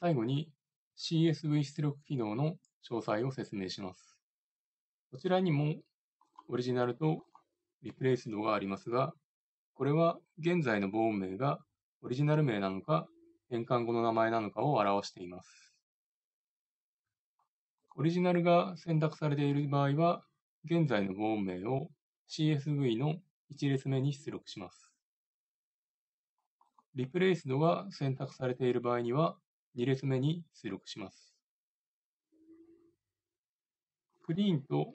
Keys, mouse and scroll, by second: 6.3-33.7 drag, 34.1-34.9 drag.